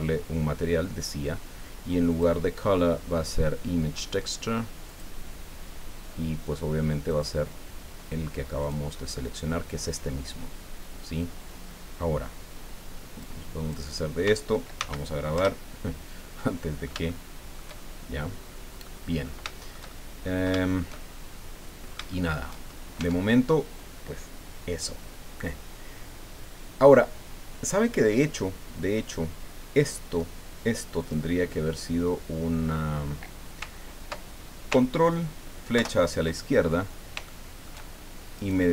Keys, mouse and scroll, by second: 2.1 click, 4.9 click, 7.1 click, 8.6 click, 13.2 click, 14.8 ctrl+s, 15.4 ctrl+Return, 16.4 click, 18.0-18.7 shift+scroll down 4, 18.8 middle click, 19.2 click, 19.5 shift+click, 20.5-22.6 shift+drag, 23.0 Tab, 23.8-24.4 scroll up 4, 24.9-25.3 scroll down 2, 31.0 click, 35.7 ctrl+BackSpace, 37.3 shift+middle click, 38.4 right click.